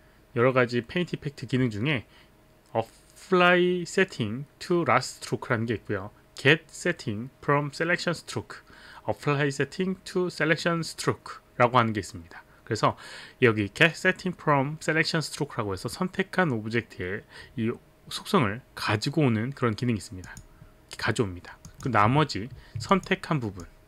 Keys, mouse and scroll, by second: 20.2 click, 21.7 click, 22.9 shift+click, 23.6 shift+click.